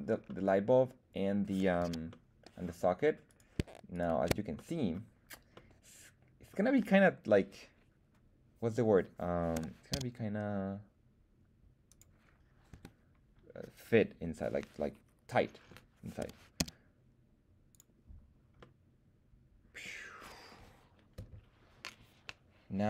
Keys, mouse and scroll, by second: 0.2-1.5 middle drag, 1.8 z, 2.0-2.5 middle drag, 3.2 click, 3.2 right click, 3.9 shift+right click, 4.5 middle click, 5.5-6.5 middle drag, 9.5 g, 9.9 z, 11.8 click, 12.6 KP_1, 16.1 g, 16.5 z, 17.6 click, 18.5-20.6 middle drag.